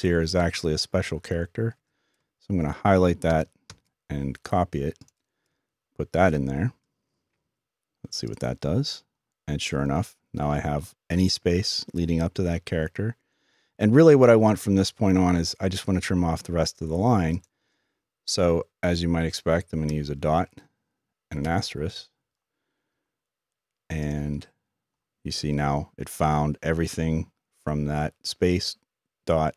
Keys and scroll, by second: 6.3 typing, 19.9 typing.